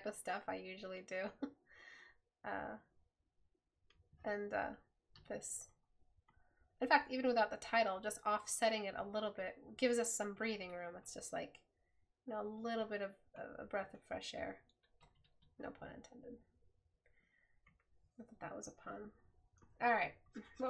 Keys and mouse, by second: 17.1 right click.